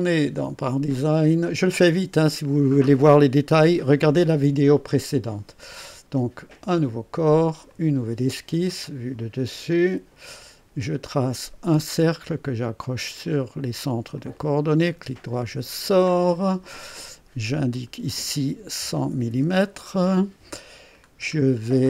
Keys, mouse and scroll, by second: 6.6 click, 7.7 click, 8.8 click, 9.7 click, 11.3 click, 13.2 click, 14.1 click, 14.6 right click, 16.2 click, 17.7 click, 18.8 KP_1, 19.1 KP_0, 19.3 KP_0, 19.9 KP_Enter, 21.0-21.6 scroll down 2.